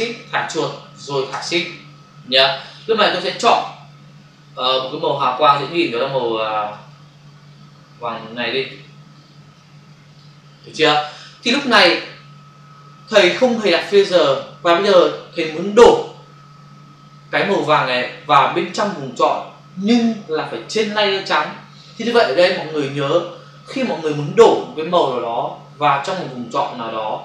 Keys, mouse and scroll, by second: 4.6 click, 6.1 click, 9.1 click, 10.0 click.